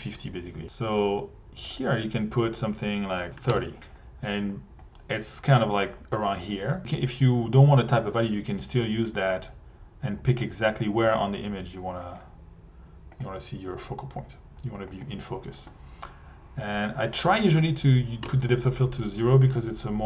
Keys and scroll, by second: 3.0-3.8 typing, 18.2 0, 18.9 Return.